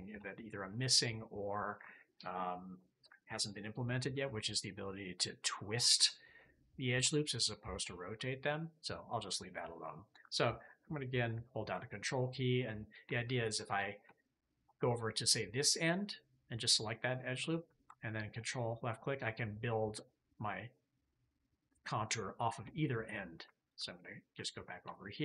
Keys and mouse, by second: 0.0 shift+middle click, 1.0-7.9 middle drag, 7.9 KP_3, 13.4 alt+click, 14.1 shift+click, 18.3 ctrl+click, 20.3-21.9 drag, 22.4 KP_3, 23.5 alt+click, 24.3 alt+click, 24.8 shift+click.